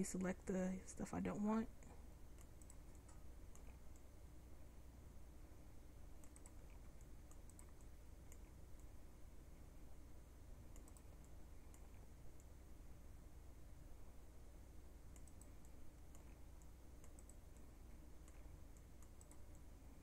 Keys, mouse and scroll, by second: 3.8 c, 6.8 c, 8.6 c, 12.0 c, 15.2 middle click, 16.4 c, 18.4 c.